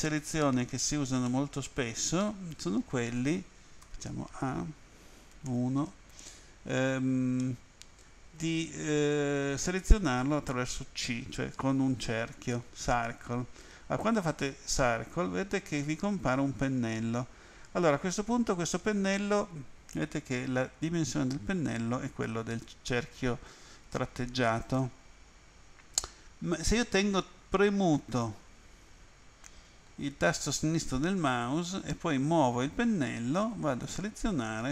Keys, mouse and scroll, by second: 1.3 middle click, 3.9 a, 5.5 End, 7.4 middle click, 8.9 End, 14.8 c, 27.0 click.